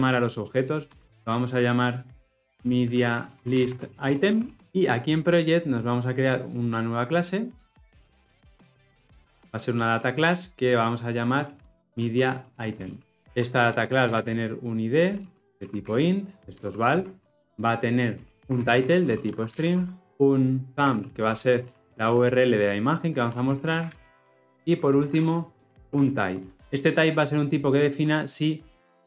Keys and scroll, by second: 1.6 shift+F6.